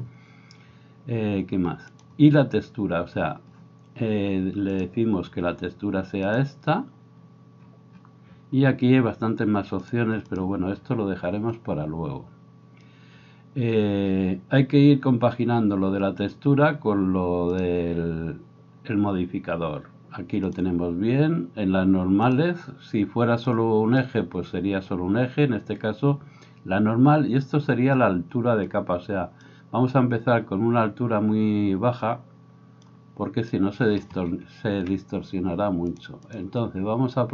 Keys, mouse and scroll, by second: 2.5-4.8 middle drag, 4.8-17.6 drag, 17.6-20.5 middle drag, 20.5-36.0 drag, 36.0 middle click, 36.3-37.3 drag.